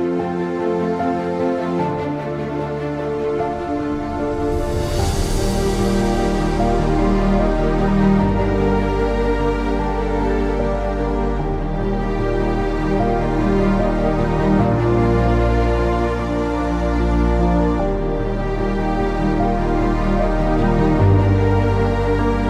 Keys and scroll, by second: 0.6-5.5 typing, 8.2-9.0 typing, 10.3-21.6 typing.